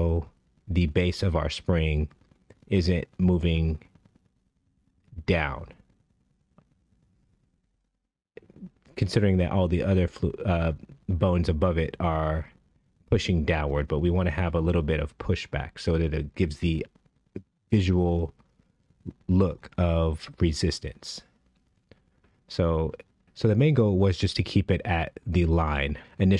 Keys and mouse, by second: 0.0-1.1 right drag, 3.8 click, 4.9 shift+drag, 6.9 g, 10.7 g, 12.6 z, 14.9 KP_Decimal, 16.3 KP_0, 16.7 KP_3, 17.4 KP_Enter, 20.5 i, 23.3 space, 24.4 space, 25.0 space.